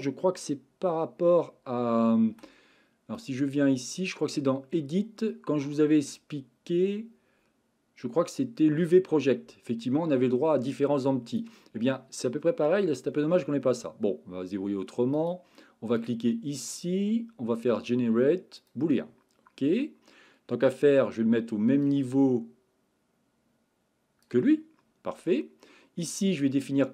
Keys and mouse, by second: 3.2-12.0 drag, 15.1 click, 16.0-18.7 drag, 21.8-24.3 drag.